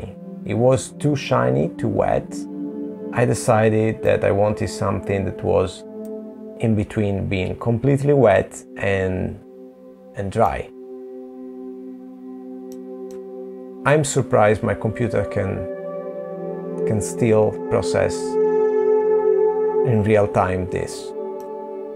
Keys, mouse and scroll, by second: 2.9 middle click, 11.3 click, 12.6 middle click, 15.4 scroll down 2, 17.3 click, 17.3-18.3 scroll down 1, 18.4 click, 19.9 click.